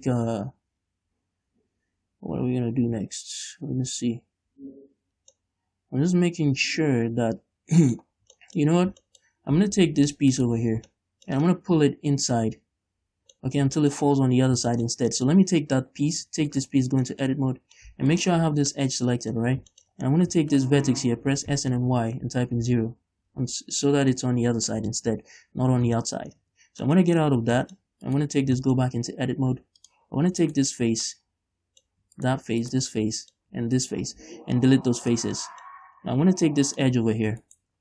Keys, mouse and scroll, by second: 5.6-10.5 middle drag, 8.4 scroll down 2, 10.5 alt+right click, 11.1-13.7 shift+middle drag, 13.7-14.7 scroll up 5, 14.0 shift+middle click, 14.7-15.7 shift+middle drag, 14.7 scroll down 2, 15.7 Tab, 16.7 shift+right click, 17.0 Tab, 17.3 middle click, 17.5-18.0 scroll up 2, 18.0 scroll up 1, 18.3 alt+right click, 18.8 scroll down 2, 19.0 middle click, 19.6 scroll up 1, 19.9 shift+middle click, 20.2 scroll up 1, 20.7 shift+right click, 21.4 s, 22.9 Return, 24.6-24.9 scroll down 2, 24.9-26.0 middle drag, 26.0 scroll down 2, 26.2 shift+middle click, 26.6 Tab, 27.1 middle click, 28.3 right click, 28.4 Tab, 28.8 shift+middle click, 29.1 scroll up 1, 30.0 click, 30.6 right click, 31.3 middle click, 32.4 shift+right click, 32.9 shift+right click, 33.2 middle click, 34.0 shift+right click, 34.4 x, 35.6 middle click, 36.9 click, 37.6 right click.